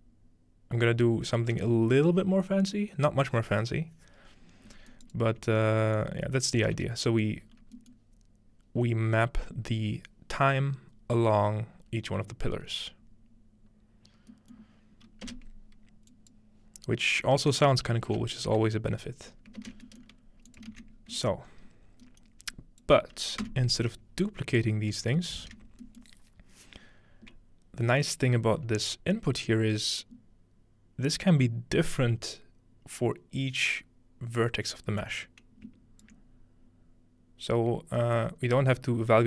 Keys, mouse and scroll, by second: 4.9 right click, 6.9-9.4 scroll down 1, 14.3-16.1 middle drag, 15.3 space, 16.1 click, 18.1 Tab, 18.3 Right, 19.3-20.9 scroll up 2, 19.6 ctrl+space, 20.5-21.3 ctrl+drag, 20.7 ctrl+x, 21.0-21.5 scroll down 1, 21.4-23.4 middle drag, 21.5 scroll up 1, 22.5-22.9 drag, 23.4 x, 23.8-24.4 scroll down 1, 24.6 click, 26.9-27.4 scroll up 2, 27.4-28.5 scroll down 2, 28.8-30.8 scroll up 2, 35.0-36.1 drag, 37.5-38.4 scroll down 2, 38.2-39.2 middle drag, 38.4-39.2 scroll up 2.